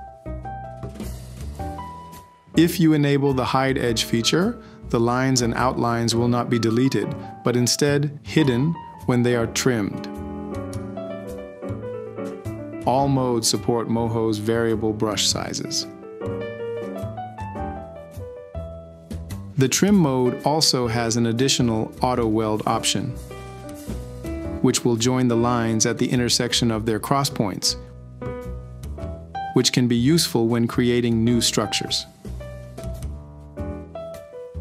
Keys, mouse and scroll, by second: 14.1 space, 19.3 t, 20.3 s, 21.3 ctrl+c, 21.5 ctrl+v, 22.9 ctrl+c, 23.0 ctrl+v, 24.1 e, 27.5 click, 29.3 Escape.